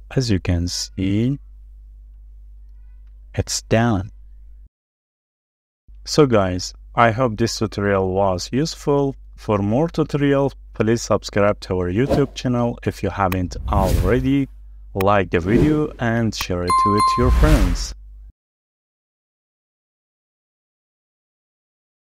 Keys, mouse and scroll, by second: 0.1 middle click, 0.7-1.3 scroll up 1, 1.3 middle click, 2.5-3.2 scroll up 1, 3.7 middle click, 6.2 scroll down 1, 7.4 middle click, 8.2 shift+middle click, 8.8 scroll up 1, 9.2 middle click, 10.3-10.7 scroll up 1, 10.7 middle click, 10.8-11.4 scroll down 1, 12.3 shift+middle click, 14.7 middle click.